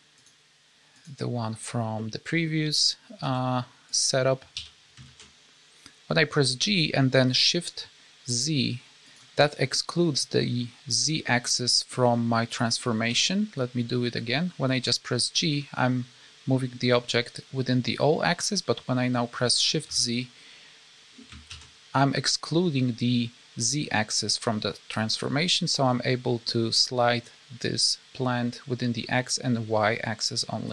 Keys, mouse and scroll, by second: 0.9 click, 2.0 middle click, 2.4 scroll down 1, 3.2 s, 4.5 g, 9.3 middle click, 11.0 scroll down 3, 11.2 middle click, 11.9-12.4 scroll up 3, 13.1 g.